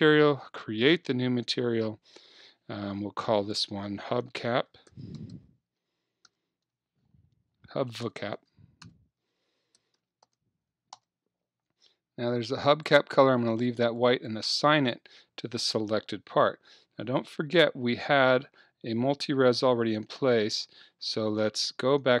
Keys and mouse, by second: 3.4-5.2 drag, 8.2 BackSpace, 8.4 BackSpace, 14.0 click, 14.8-15.9 middle drag, 16.3-18.7 middle drag, 21.6 Tab.